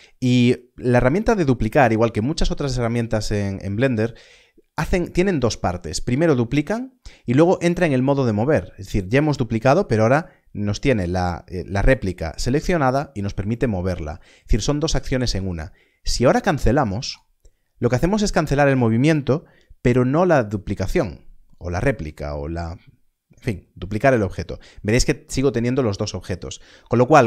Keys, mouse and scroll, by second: 21.7 click.